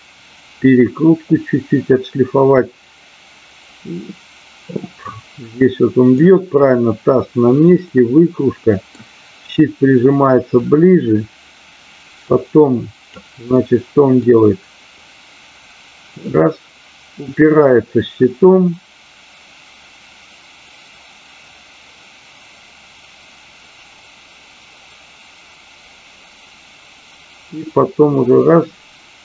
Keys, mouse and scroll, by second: 5.4-6.1 middle drag, 7.7-8.9 middle drag, 10.7-13.1 drag, 13.5-14.2 middle drag, 14.9-29.2 drag.